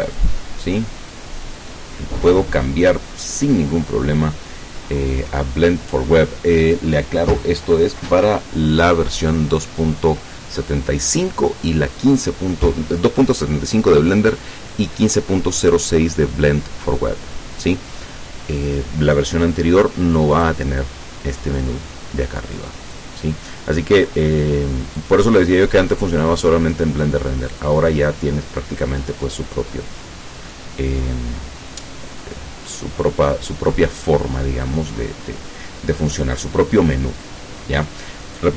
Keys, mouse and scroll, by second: 0.2 click, 5.0-6.0 scroll down 2, 6.0-7.0 scroll up 3, 20.4 click, 23.0 click, 25.0 click, 27.6 click, 31.0-31.7 scroll down 3, 34.1-35.3 scroll up 2.